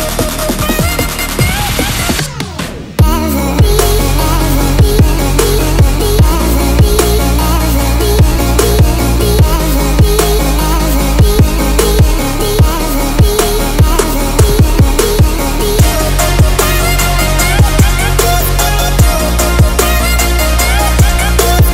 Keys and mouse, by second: 0.1 drag, 0.7 shift+click, 1.3 x, 3.1 drag, 3.6 Tab, 3.9-4.8 drag, 5.0 Tab, 5.9-7.1 drag, 8.3 ctrl+r, 13.8-15.5 drag, 17.3 3, 17.7 click, 18.7 shift+click, 18.8 middle click, 19.4 shift+click, 19.6 middle click, 19.9-20.2 shift+middle drag, 20.4 x.